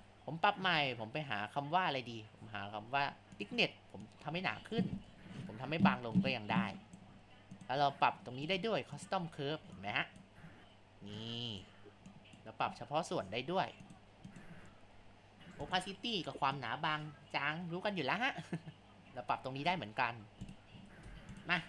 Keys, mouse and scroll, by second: 4.0-8.6 drag, 8.9-19.6 drag, 20.4 click, 21.0 Tab.